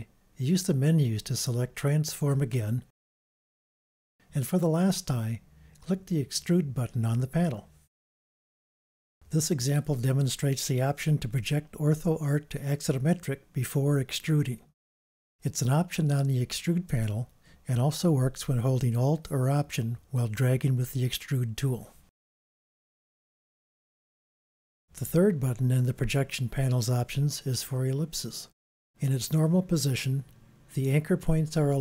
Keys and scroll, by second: 16.1 super+z.